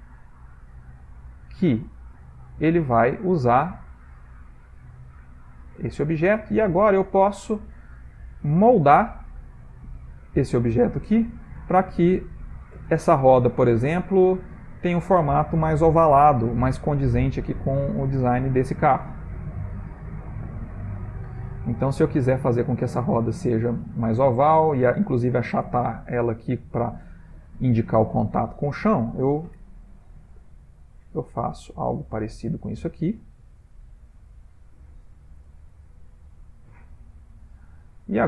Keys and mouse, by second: 0.8 click, 2.7 click, 5.3 middle click, 6.1 ctrl+middle click, 6.8 click, 7.4 Tab, 9.1 click, 11.1 g, 13.9 click, 16.8 ctrl+middle click, 17.1 ctrl+middle click, 17.7 ctrl+middle click, 19.5 g, 21.7 middle click, 23.3 click, 27.2 middle click, 27.6 middle click, 28.4 middle click, 29.6 g, 32.8 click, 35.5 g, 37.5 ctrl+middle click, 37.5 ctrl+middle click, 37.8 ctrl+middle click, 37.9 middle click.